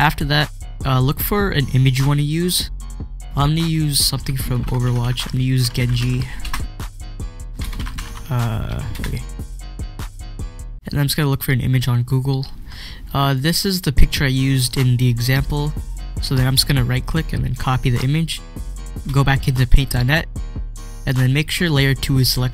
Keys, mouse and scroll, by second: 2.2 click, 2.6-3.4 scroll up 1, 3.4 click, 4.2-9.1 typing, 7.3 click, 10.2 click, 13.2 click, 16.3 click, 16.4 right click, 17.5 click, 19.7 click.